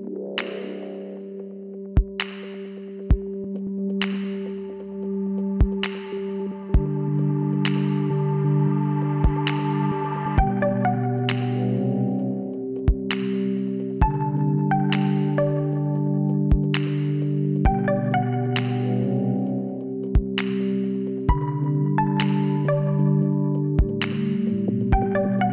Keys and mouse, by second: 0.6 z, 3.4 t, 4.4 z, 6.5 click, 9.5-13.7 drag, 14.3 middle click, 16.1-17.5 middle drag, 17.5-19.3 drag, 19.6-25.5 drag.